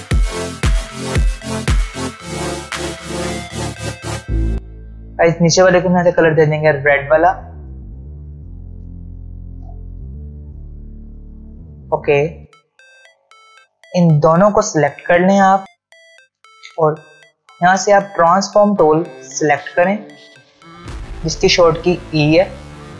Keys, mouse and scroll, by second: 0.1-0.5 ctrl+alt+scroll down 2, 1.0 click, 1.3 Return, 1.4 click, 2.5 click, 2.9 click, 4.1 scroll down 1, 4.2-4.5 click, 4.5 ctrl+z, 5.0 click, 7.2 ctrl+alt+scroll up 1, 9.9 ctrl+alt+scroll down 1, 10.5 click, 12.4 alt+scroll down 1, 13.8-15.1 drag, 17.8 ctrl+alt+scroll up 1, 21.0-22.0 ctrl+alt+scroll down 1.